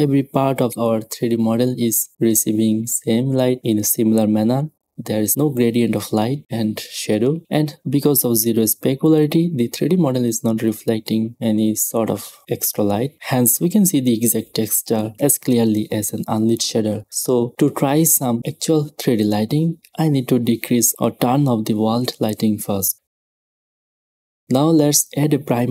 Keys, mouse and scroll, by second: 0.6-5.4 drag, 1.7 middle click, 4.1-6.2 middle drag, 6.2-8.2 drag, 9.5-11.5 middle drag, 11.7-13.7 drag, 14.4-17.4 drag, 17.4-17.9 middle drag, 19.1 right click, 21.5-23.2 drag, 22.6-24.4 typing, 23.3 middle click, 23.6 click, 23.9-24.3 middle drag, 24.3-25.0 drag, 25.0-25.6 middle drag.